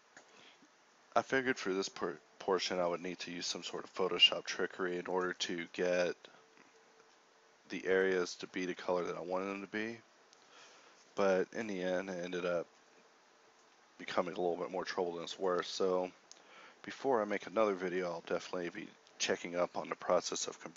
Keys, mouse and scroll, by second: 1.8 g, 12.7 KP_Divide, 13.4 z, 13.6 z.